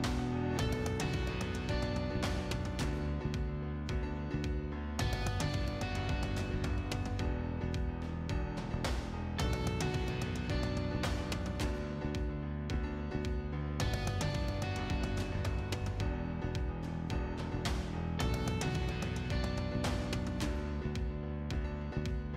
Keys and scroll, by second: 0.8 t, 1.2 space, 3.4 Escape, 6.5 m, 6.8 i, 7.4 space, 14.4 F8, 15.4 F8.